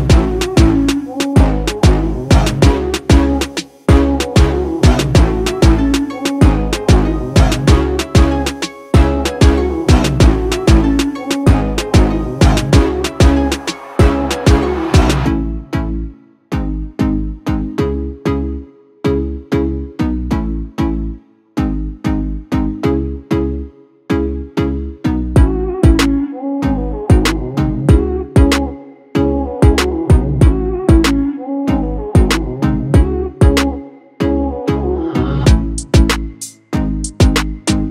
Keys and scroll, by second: 0.4 space, 1.9 space, 16.6 ctrl++, 18.2 ctrl+-, 18.3 ctrl+-, 22.9 ctrl++, 23.2 ctrl++, 23.9 ctrl+-, 24.8 ctrl+t, 26.8 ctrl+t.